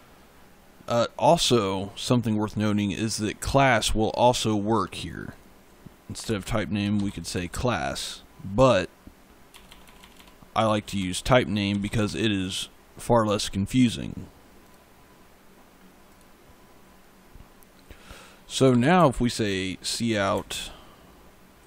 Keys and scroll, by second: 6.1-7.4 typing, 9.4-12.4 typing, 18.2-20.2 typing, 21.5 a.